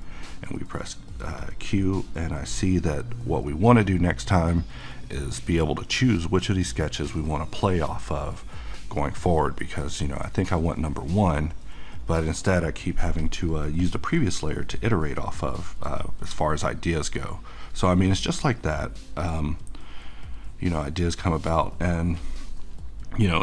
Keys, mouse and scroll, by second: 0.5 `, 1.4 click, 1.6 q, 2.5 click, 3.0-6.3 middle drag, 6.3 middle click, 7.4-9.0 middle drag, 9.0-10.8 middle drag, 10.8-13.2 middle drag, 13.2-23.4 drag.